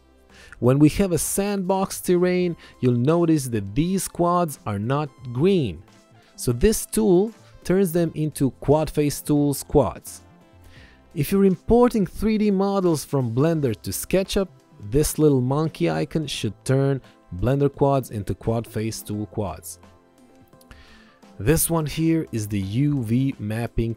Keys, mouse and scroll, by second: 0.1 click, 4.4 ctrl+1, 4.6 click, 5.8 alt+y, 7.0 click, 21.7 ctrl+1, 21.8 ctrl+click.